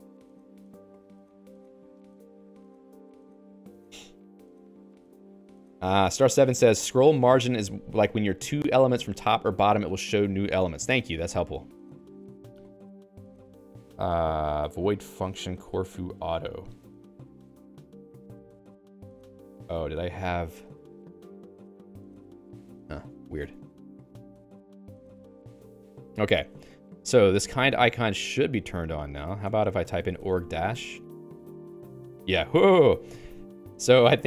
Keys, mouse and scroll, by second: 5.9 ctrl+alt+x, 17.7 q, 18.1 Escape, 19.1-31.0 typing, 25.5 ctrl+s, 29.5 Return.